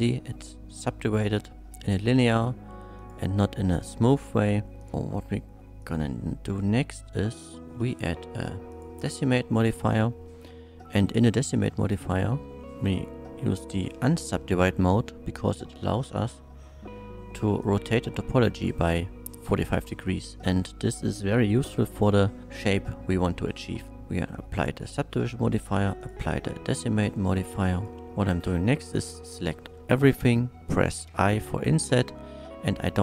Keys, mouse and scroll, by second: 3.0 click, 4.8 click, 5.8 click, 7.3 click, 7.8 d, 7.8 e, 8.7 click, 13.6 click, 17.6 click, 24.3 click, 25.4 click, 26.0 click, 27.2 click, 27.7 click, 28.4 a, 32.1 i.